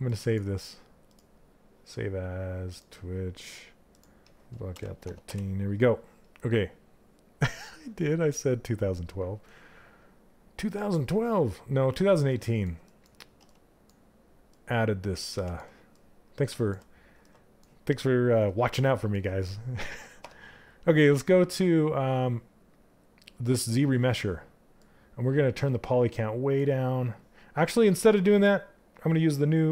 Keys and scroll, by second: 4.5 3, 4.7 Return.